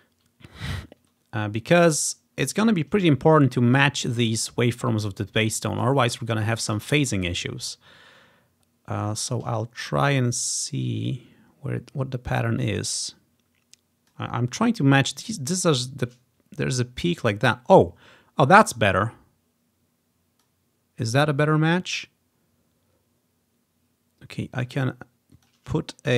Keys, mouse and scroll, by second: 0.0 click, 0.1-1.9 drag, 1.1-2.4 scroll up 1, 2.4 scroll down 2, 3.1 scroll up 2, 4.5 scroll down 2, 6.2-6.9 ctrl+scroll down 2, 6.9-7.6 scroll down 1, 7.6-9.0 scroll up 1, 9.0-9.8 scroll up 1, 10.0-14.2 drag, 18.8-20.5 drag, 21.4 click, 24.6 click.